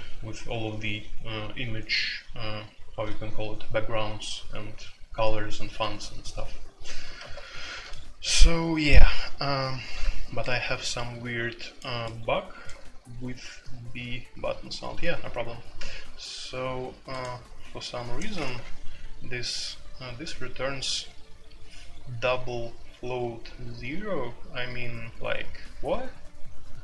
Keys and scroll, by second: 18.3 a, 18.5 Return.